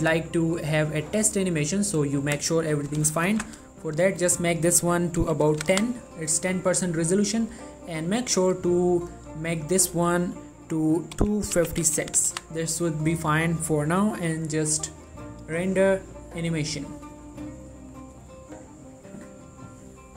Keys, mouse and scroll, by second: 7.1 click, 15.6 click.